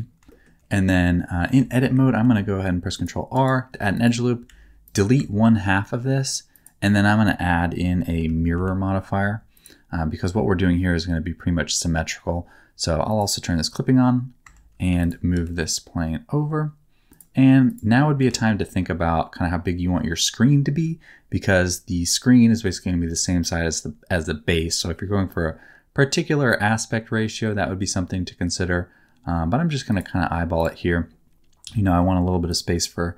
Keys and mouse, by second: 0.2 shift+middle click, 1.5 Tab, 2.1 ctrl+r, 3.3 middle click, 3.7 3, 4.4 x, 5.1 Tab, 6.5-9.6 drag, 13.1 click, 14.4 Tab, 14.9 2, 15.3 g, 18.2 g, 29.8 click, 29.8 right click, 31.6 g, 31.8 middle click, 32.4 click, 32.4 right click.